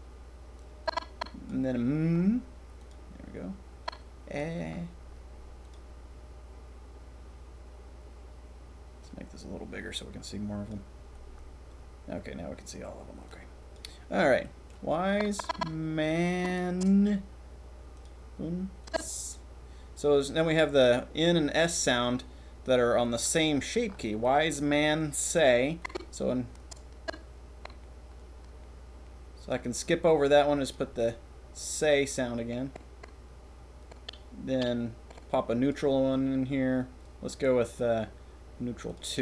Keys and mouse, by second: 0.8 click, 3.8-4.4 drag, 9.0-10.6 drag, 13.2 click, 14.4 click, 15.0 click, 23.4 click, 24.2 click, 24.5-25.8 middle drag, 25.9 drag.